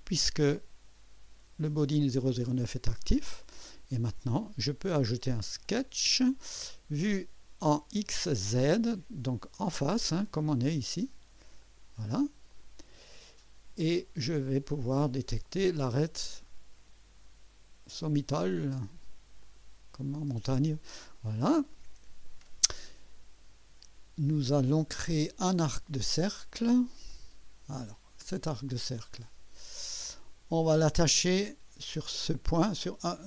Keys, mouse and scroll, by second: 4.1 click, 5.6 click, 11.6 click, 12.5 click, 13.4 scroll up 2, 13.9-14.7 right drag, 16.4 click, 19.4 click, 20.6 scroll up 2, 21.2 right click, 25.0 scroll down 2, 27.1 click, 29.8 click.